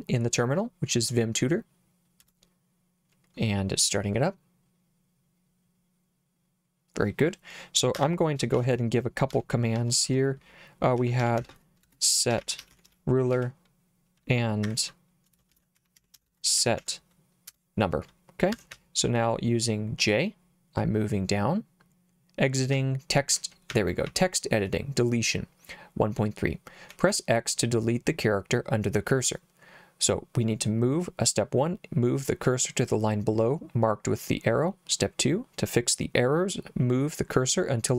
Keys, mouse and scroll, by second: 2.2 Return, 8.0 Escape, 8.6 shift+;, 9.3 Up, 9.8 Up, 10.1 Up, 10.8-13.4 typing, 15.3-17.3 typing, 17.5 Return, 18.5 Escape, 18.7 j, 22.8 j, 23.7 j, 24.1 k, 26.2 j.